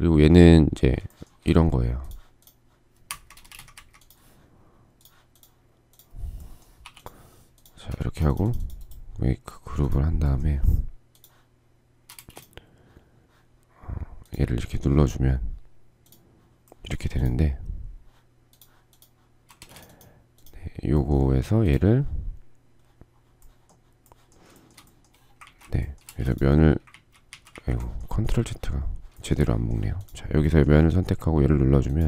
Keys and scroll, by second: 2.7 Escape, 3.0 space, 3.1 Escape, 3.3 Escape, 6.4 p, 7.6 space, 11.7 space, 19.2 space, 25.6 ctrl+space.